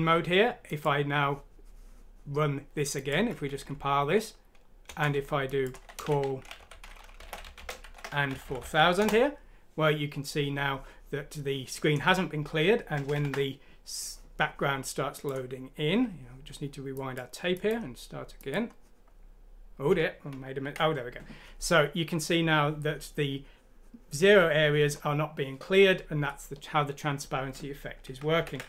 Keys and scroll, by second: 3.6 F9, 4.8 Return, 5.7-8.9 typing, 9.0 Return, 10.8 typing, 13.2 F4, 28.3 ctrl+F9.